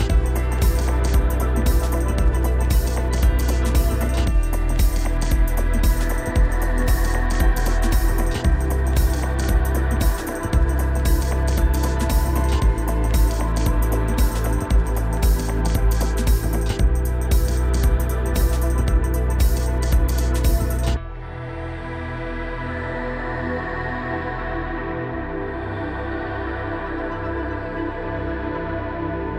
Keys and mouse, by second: 10.8 middle click, 13.8 click, 15.8 middle click, 16.4 Tab, 17.3 click, 18.6-18.9 shift+drag, 19.5 click, 22.6 shift+d, 24.8 g, 27.1 g, 28.7 click.